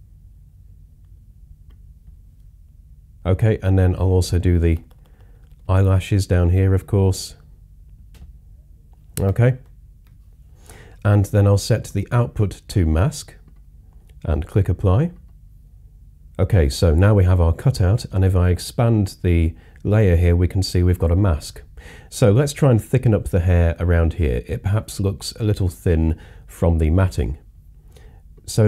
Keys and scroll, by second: 1.1 typing, 4.8-5.5 typing, 9.6 super+0.